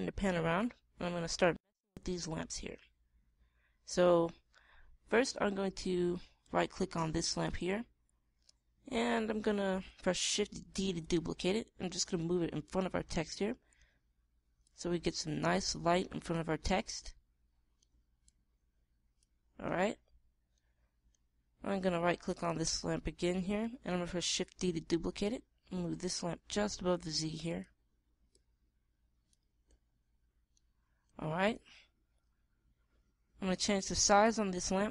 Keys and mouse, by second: 1.1 middle click, 3.1 middle click, 5.1-7.0 middle drag, 7.0-8.7 right drag, 11.3 shift+d, 13.2-14.6 drag, 22.9-24.6 right drag, 25.4 shift+d, 28.1 click, 33.4-34.6 middle drag.